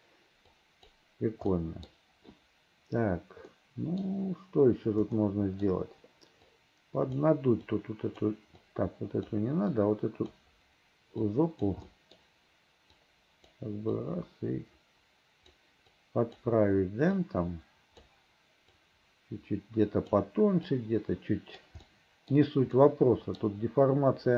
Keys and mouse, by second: 0.7 click, 1.6 middle click, 3.6 middle click, 5.3 middle click, 6.6 click, 7.8 click, 8.7 click, 9.9 click, 11.3 click, 12.0 middle click, 13.1 click, 14.0-15.6 drag, 16.0 click, 17.3 click, 18.9-20.2 drag, 20.8 right click, 22.0 click, 22.8 click.